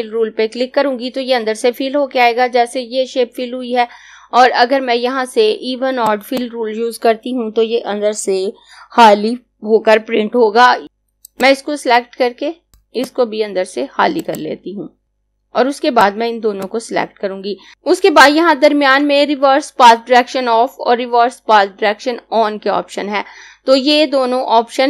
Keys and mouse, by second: 5.7 click, 11.3 click, 12.8 click, 15.9 click.